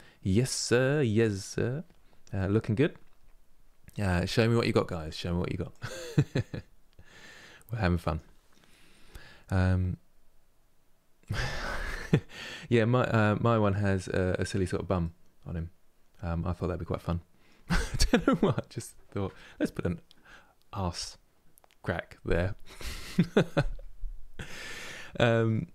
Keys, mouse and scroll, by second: 12.8-17.7 middle drag.